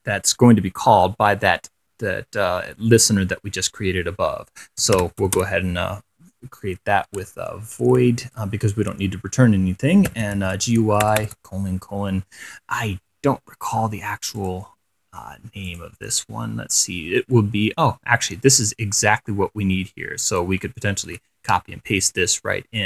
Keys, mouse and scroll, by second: 2.0-2.9 scroll up 4, 3.3-3.7 scroll down 2, 4.8-5.9 typing, 10.1-12.0 typing, 14.6 click, 15.9 click, 16.8-17.3 scroll down 2, 18.8-20.9 drag, 21.3 ctrl+c.